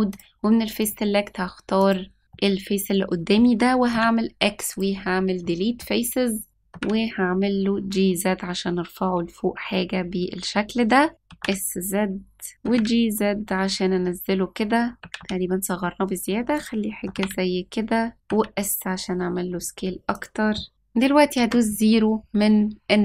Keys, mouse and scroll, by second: 0.1 click, 1.7 click, 2.2 scroll down 1, 2.3-3.3 middle drag, 3.9 x, 5.4 middle click, 6.3 scroll up 1, 6.5 click, 6.5 g, 11.2 s, 12.6 g, 14.9 s, 17.0 g, 18.2 s, 21.3 KP_0.